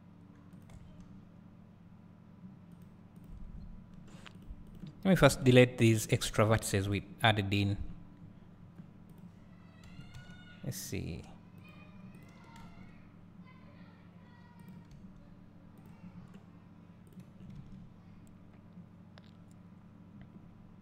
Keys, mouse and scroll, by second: 0.7 s, 3.1 click, 3.6-3.9 scroll up 1, 3.9-4.3 scroll down 1, 4.3 click, 4.7 click, 5.3 KP_Decimal, 6.9 x, 7.2 scroll down 1, 8.2 scroll up 1, 9.1 click, 9.9 g, 12.1 click, 12.6 g, 16.1-17.1 drag, 17.4 scroll down 1, 17.6 Tab, 18.1 scroll up 1.